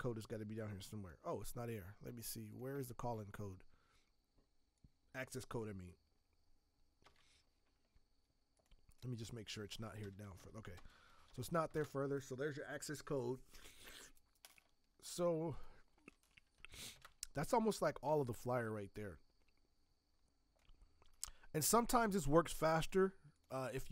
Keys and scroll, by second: 7.0 ctrl+c, 10.7 space, 11.2 ctrl+v, 11.7 ctrl+Return, 16.6 shift+Return, 18.0 v.